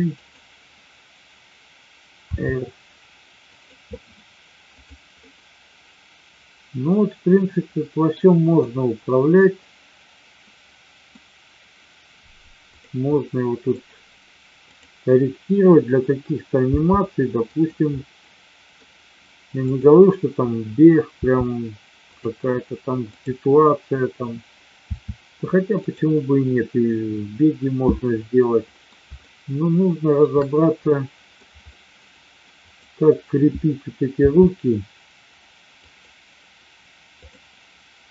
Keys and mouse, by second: 2.3 r, 4.7 drag, 5.2-8.0 middle drag, 8.6-11.0 middle drag, 13.2-13.7 middle drag, 16.7 g, 17.9-18.8 middle drag, 19.7-20.7 drag, 21.2 r, 22.0 click, 24.8 r, 28.2-28.8 middle drag, 29.2-30.2 shift+middle drag, 30.8-31.4 middle drag, 31.7 middle drag, 32.7-33.7 drag, 34.0 r, 35.9 click, 37.2-38.1 drag.